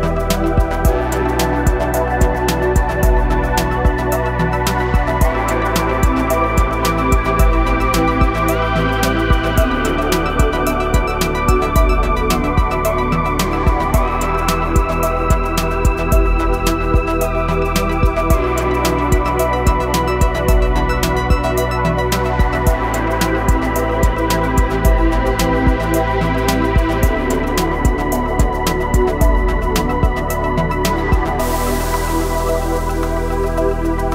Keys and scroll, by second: 2.6 g, 7.4 ctrl+r, 11.3 Escape, 18.3 g, 18.5 y, 23.3 g, 29.3 g, 34.0 g.